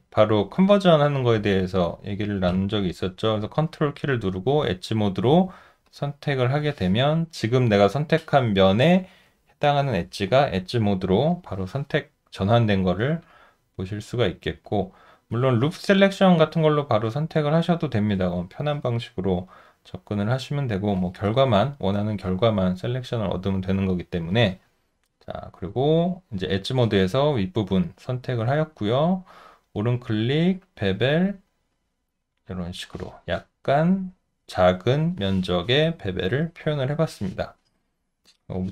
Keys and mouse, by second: 5.9 ctrl+click, 13.2 alt+click.